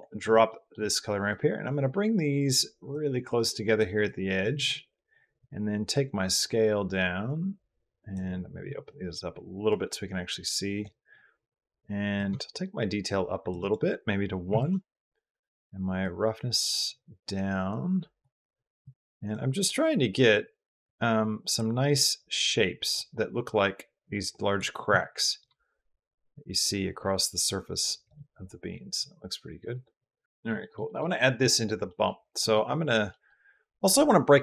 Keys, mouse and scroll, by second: 0.4 middle click, 1.1-2.7 middle drag, 3.1 middle click, 3.8 middle click, 5.2-8.0 drag, 9.5-10.8 drag, 12.0-13.3 shift+drag, 13.5 click, 15.8-18.2 drag, 18.8 click, 20.7 click, 21.8 click, 23.2-24.4 drag, 25.2-27.9 shift+drag, 28.9-30.3 drag, 30.4 shift+drag, 30.7 middle drag, 31.7 middle drag, 32.2 middle click, 33.0 middle click.